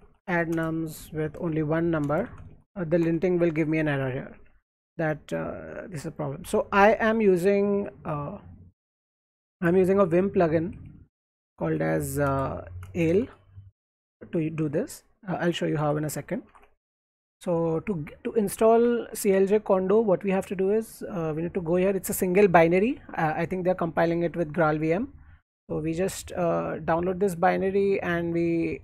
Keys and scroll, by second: 0.0-5.2 typing, 6.9 alt+Left, 7.7 o, 9.4 o, 10.7-15.0 typing, 15.4 alt+Tab, 15.8 alt+Tab, 16.5 alt+Tab, 18.7 ctrl+c.